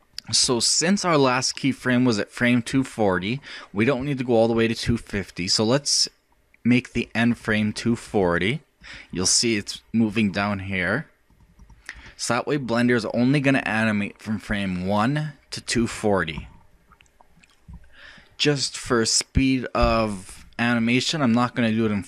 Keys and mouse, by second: 0.2-2.8 middle drag, 7.0-10.6 middle drag, 11.3-13.6 middle drag, 13.6 click.